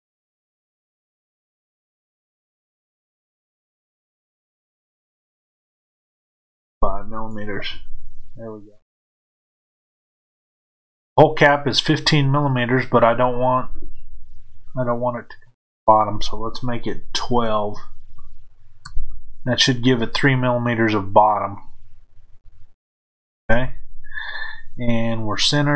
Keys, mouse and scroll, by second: 1.2-25.7 drag, 7.8 KP_Enter, 18.9 KP_Enter, 21.6-23.3 scroll down 2, 23.3 KP_1.